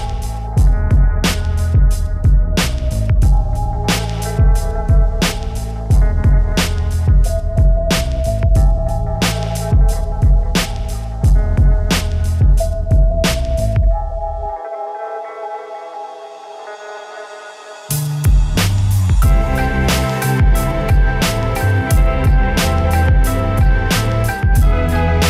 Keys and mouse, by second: 0.0 click, 0.0 right click, 0.1 shift+e, 1.0 click, 1.5 right click, 1.9 right click, 2.1 shift+e, 2.7 ctrl+r, 3.5 click, 3.8 ctrl+r, 4.6 KP_Decimal, 5.3 right click, 5.7 middle click, 5.7 s, 6.1 click, 6.3 right click, 6.4 click, 7.0 middle click, 7.4 right click, 7.5 KP_Decimal, 7.8 ctrl+r, 8.3 click, 8.6 right click, 8.7 s, 9.0 click, 9.1 ctrl+r, 9.8 Tab, 9.9 Tab, 11.2 KP_1, 12.0 ctrl+r, 12.3 s, 12.5 click, 12.9 ctrl+r, 13.6 click, 14.1 a, 14.1 z, 14.2 b, 14.6 click, 15.2 s, 15.6 click, 16.1 z, 16.7 ctrl+r, 17.1 click, 17.5 ctrl+r, 17.8 a, 17.8 z, 18.2 click, 18.6 z, 19.8-20.2 right drag, 20.0 click, 20.3-20.7 right drag, 21.0 ctrl+r, 21.4 ctrl+z, 21.5 ctrl+r, 22.3 Tab, 24.0 Tab, 24.8 right click, 25.1 middle click.